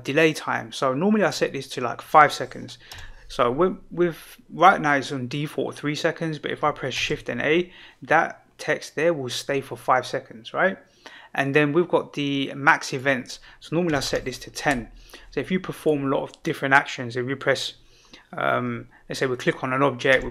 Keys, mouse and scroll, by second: 1.2-4.6 drag, 6.9 shift+a, 12.8-14.6 drag, 15.7 click, 19.3 click, 20.1 g.